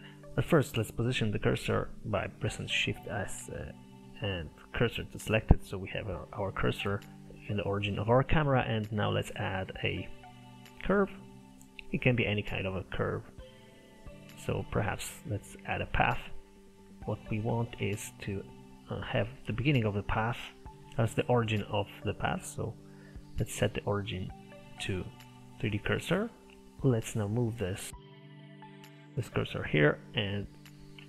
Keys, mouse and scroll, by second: 0.0 n, 2.9 shift+s, 5.6-9.2 middle drag, 9.2 shift+a, 16.5 middle click, 17.0 Tab, 17.8 Tab, 18.3 click, 19.5-20.6 shift+middle drag, 20.6 click, 21.2-26.5 drag, 27.5 click, 28.2 shift+s, 30.1 click.